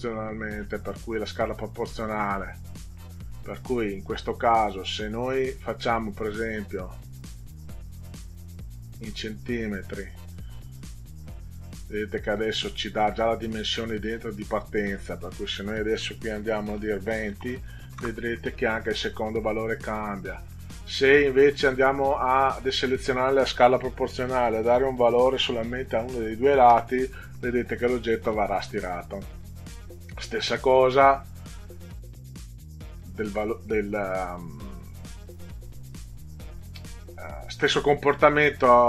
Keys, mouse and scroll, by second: 1.1 click, 2.8 click, 6.6 click, 8.9 click, 10.4 click, 14.8 click, 16.8 2, 17.4 0, 18.0 Return, 20.4 click, 21.8 click, 24.6 3, 25.2 0, 26.8 Return.